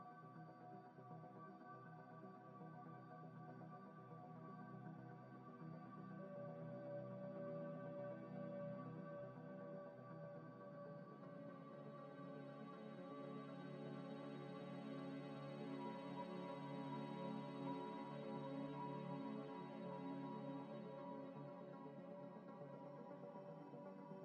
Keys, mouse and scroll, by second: 0.5 scroll down 1, 0.7 middle click, 5.1 scroll up 1, 7.8 scroll down 1, 8.4 middle click, 9.6 F3, 11.8 F3, 12.2-12.6 typing, 12.9 Return, 13.7 F3, 15.3 typing, 16.4 Return, 17.4 Delete, 20.5 ctrl+shift+right click, 22.1 scroll up 1, 22.9 z, 23.3 middle click.